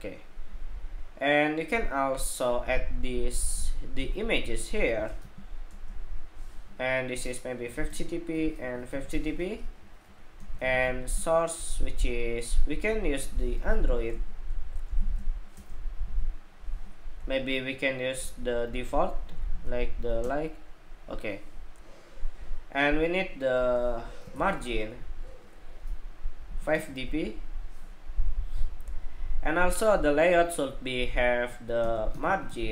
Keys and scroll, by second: 9.3 Escape, 10.0 ↺.